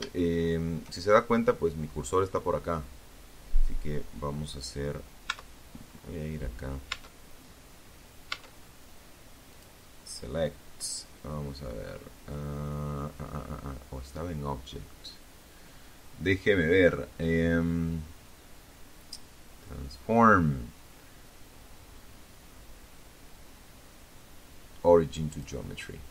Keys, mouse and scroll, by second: 3.5 Tab, 4.0-4.6 scroll up 1, 4.6-5.1 scroll down 1, 5.1 Tab, 6.5 Tab, 7.6 click, 23.4 click, 24.8 ctrl+z.